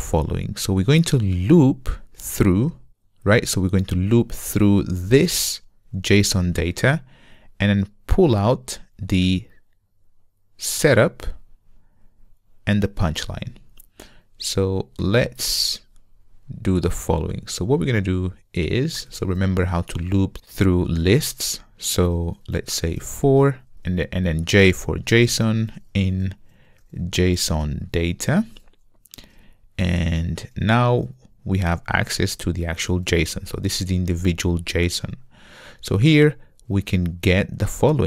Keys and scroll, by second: 27.8 Return.